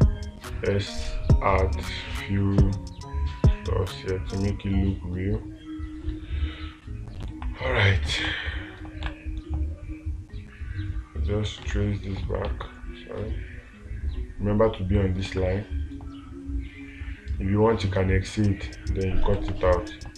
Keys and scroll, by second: 7.8 space, 12.1 space, 12.9 ctrl+z, 15.7 space, 19.8 space.